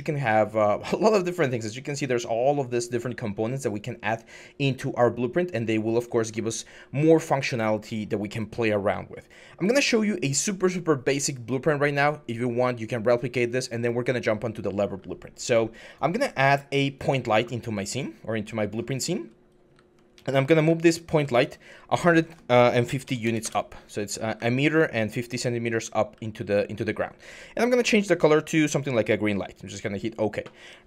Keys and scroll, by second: 18.9-25.9 typing, 23.3 Return.